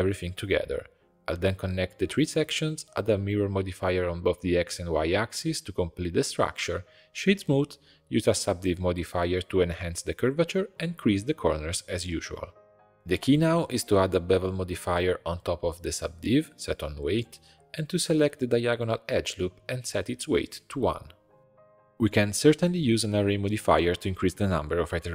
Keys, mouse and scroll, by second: 0.2 shift+click, 0.7 ctrl+j, 1.0 shift+click, 1.4 f, 1.7 click, 1.9-2.3 f, 2.4 middle click, 3.0-5.2 drag, 5.9 click, 6.6 click, 6.7-8.2 right drag, 8.2-10.8 drag, 11.0 shift+click, 11.4 shift+e, 12.0 click, 12.3 shift+click, 12.6 shift+e, 12.9 Tab, 13.0-15.2 drag, 16.1-16.7 drag, 17.0 middle click, 17.3 Tab, 17.6 2, 18.3 alt+click, 20.4 click, 21.2-25.1 drag.